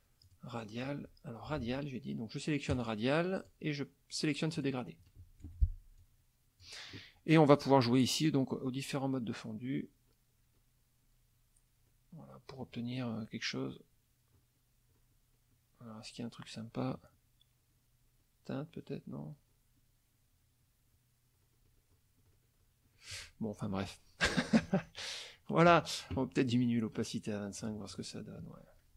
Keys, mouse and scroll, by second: 0.2 click, 1.6 ctrl+z, 2.7 click, 3.4 click, 4.6 click, 5.5 F1, 6.0 click, 8.8 scroll down 2, 9.4-11.1 scroll down 8, 11.4 scroll down 2, 11.9 scroll up 2, 13.6 scroll down 2, 14.2 scroll down 2, 14.8-15.8 scroll down 6, 16.2 scroll down 2, 17.2 scroll down 2, 18.2 scroll up 2, 18.7-20.1 scroll down 8, 20.9 scroll down 2, 21.4-22.0 scroll up 2, 22.3-22.6 scroll up 2, 22.9 scroll up 2, 25.0-25.8 ctrl+shift+drag, 26.9 right click, 27.6 click, 27.9 click.